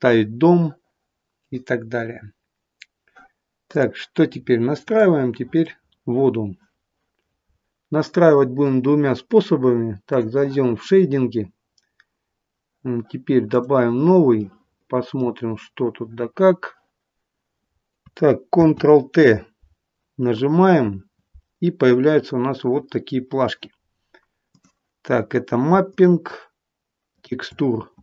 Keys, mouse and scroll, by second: 4.3-4.9 scroll down 4, 4.9 middle click, 4.9 scroll down 1, 5.8 scroll down 2.